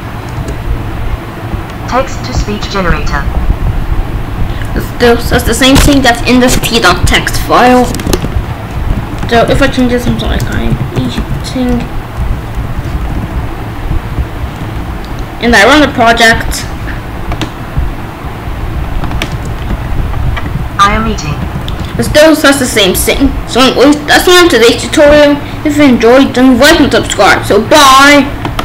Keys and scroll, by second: 0.3 Return, 9.0 ctrl+a, 9.3-12.8 typing, 13.1 ctrl+s, 14.8 ctrl+b, 19.4 Return.